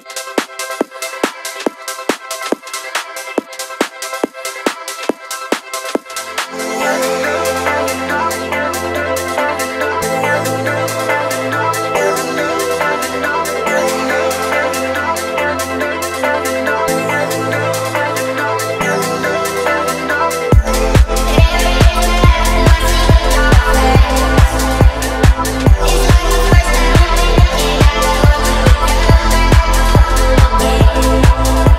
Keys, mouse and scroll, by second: 0.3 click, 1.3 click, 3.0 scroll down 1, 3.4-3.8 scroll up 1, 3.8 click, 4.7-6.0 drag, 6.8 click, 7.4 click, 14.2-15.9 drag, 16.5-16.9 scroll down 1, 16.9-17.8 scroll up 2, 17.8 click, 19.5 click, 20.1 space, 21.7 space, 21.9 click, 22.9 click, 25.5 click, 25.9 shift+middle click, 27.3 click, 28.4 shift+middle drag, 29.0 click.